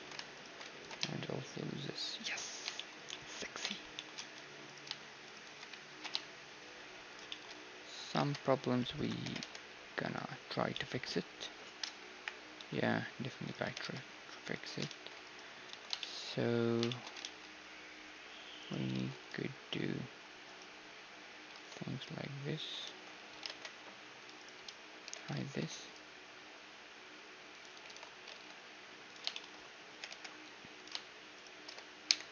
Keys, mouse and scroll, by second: 0.3-2.2 right drag, 0.7 ctrl+b, 2.4-2.7 scroll up 1, 2.7-5.9 middle drag, 4.6-7.1 right drag, 5.9 ctrl+b, 7.2 middle click, 8.1 ctrl+Tab, 9.0-11.3 right drag, 9.2 g, 12.1 middle click, 12.1 KP_1, 12.5 a, 12.9 middle click, 13.4-16.6 right drag, 13.6 g, 14.9 ctrl+r, 15.7 a, 16.6-18.7 middle drag, 18.0 ctrl+r, 18.7-21.6 right drag, 18.9 ctrl+r, 21.6 ctrl+Tab, 22.9 ctrl+z, 23.4 ctrl+Tab, 24.4-26.2 right drag, 25.0 h, 25.4 ctrl+r, 27.9 alt+h, 28.3 ctrl+Tab, 29.3-31.4 middle drag, 29.9 g, 31.4-32.3 right drag, 32.0 j.